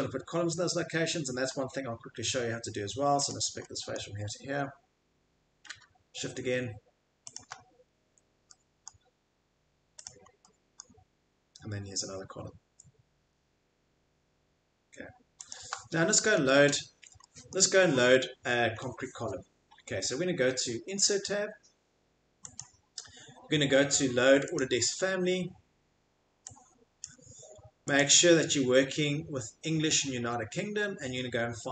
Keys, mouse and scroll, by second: 1.5-2.4 scroll, 3.2 scroll, 3.2 click, 4.0 middle click, 7.3 shift+click, 8.0 Escape, 8.9 middle click, 10.0 click, 10.8 middle click, 15.6 shift+click, 16.0 middle click, 16.2 Escape, 16.4 middle click, 16.5 middle click, 16.7 Escape, 16.9 middle click, 17.5 middle click, 17.8 middle click, 17.9 middle click, 18.1 middle click, 18.7 middle click, 22.6 click, 24.6 click, 27.0 click, 27.9 click, 31.4-31.7 scroll.